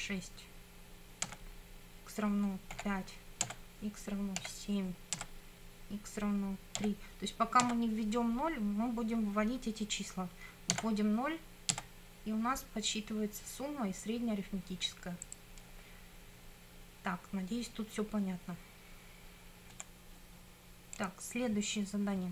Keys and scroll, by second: 1.2 Return, 2.8 5, 3.5 Return, 4.4 7, 5.2 Return, 6.8 3, 7.6 Return, 10.7 0, 11.7 Return, 19.8 F9.